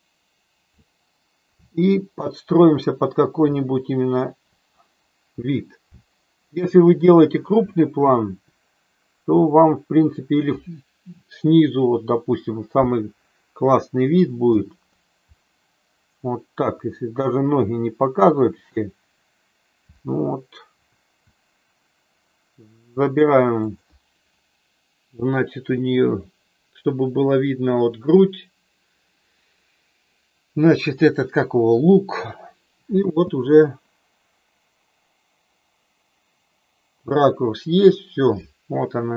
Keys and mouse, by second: 1.5-4.3 Up, 5.8 Down, 7.6-8.3 Up, 14.5 Right, 20.7 Up, 23.6 click, 32.9 space.